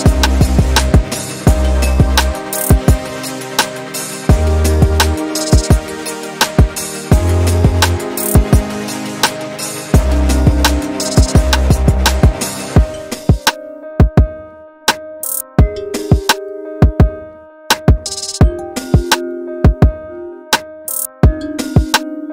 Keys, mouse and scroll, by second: 1.0 g, 3.0 click, 5.1 shift+click, 5.9 g, 8.1-9.3 shift+middle drag, 9.3 click, 9.5 shift+middle click, 10.5-11.3 scroll down 2, 11.3 shift+click, 11.6 middle click, 12.5 g, 14.1-15.1 shift+middle drag, 15.1 click, 16.1 y, 17.4 ctrl+z, 18.0 g, 19.8 KP_7, 20.5-21.9 shift+middle drag, 21.9-22.3 scroll up 1.